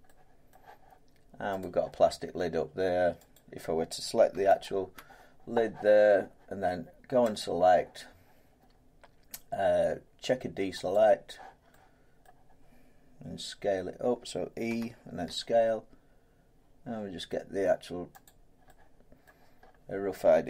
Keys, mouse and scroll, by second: 0.5 middle click, 1.6 click, 2.0 Tab, 3.3 click, 4.6 alt+click, 7.4 click, 10.9 click, 12.2 middle click, 18.2 click, 19.2 middle click, 19.6 scroll down 4.